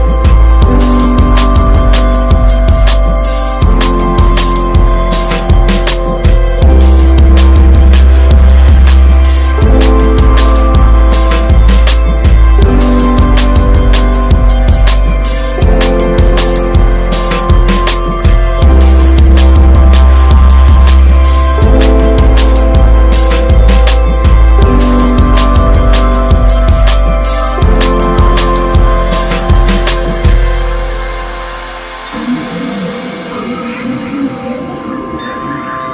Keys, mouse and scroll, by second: 0.3-1.6 drag, 1.9 click, 2.1 scroll down 2, 2.2-2.6 middle drag, 2.6 scroll down 3, 2.8 middle click, 3.0 ctrl+s, 3.1 click, 3.4-3.7 shift+middle drag, 3.7 shift+scroll up 1, 3.9 middle click, 4.1 ctrl+s, 4.7 drag, 5.2 alt+middle drag, 5.6-5.9 shift+middle drag, 5.9 s, 6.8-7.9 drag, 7.9 shift+middle click, 8.1 scroll up 1, 8.5 drag, 9.5 click, 10.1 ctrl+s, 10.2 scroll up 5, 10.5 click, 10.8 Tab, 11.0-11.3 scroll up 2, 11.3 middle click, 12.0 click, 12.6 alt+shift+click, 12.9 alt+middle click, 13.6 shift+d, 14.9 p, 15.7 ctrl+s, 15.8 click, 16.2 Tab, 16.4 click, 17.4 click, 18.2 /, 18.9-19.9 right drag, 19.9 middle drag, 20.2 ctrl+s, 21.3-24.0 drag, 25.1 Tab, 25.3 drag, 25.8 click, 26.1 /, 26.7 Tab, 26.9 click, 27.3 ctrl+s, 27.6 Tab, 27.8 click, 28.1 click, 28.9-29.4 drag, 29.9 alt+z, 30.0-30.5 scroll up 5, 30.5-31.2 shift+middle drag, 31.2 drag, 31.9 ctrl+z, 32.4 click, 33.5 r.